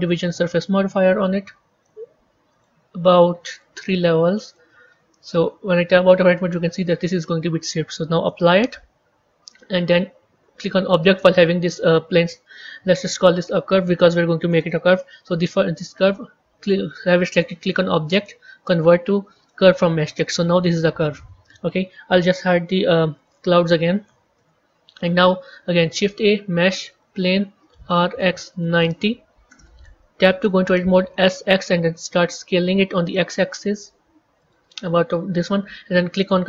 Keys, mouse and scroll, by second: 1.1 click, 2.5 click, 4.4 click, 5.7 Tab, 8.4-12.4 drag, 12.5-15.6 drag, 20.0-23.1 drag, 24.3 KP_1, 26.9 shift+a, 27.7 r, 30.2 b.